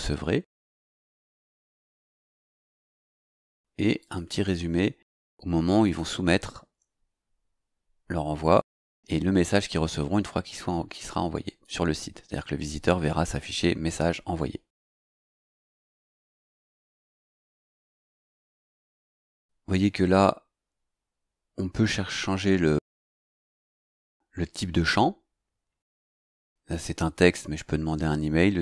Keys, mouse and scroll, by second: 4.0 click, 5.8 click, 9.5-11.8 drag, 15.4 click, 17.0 click, 22.9 click.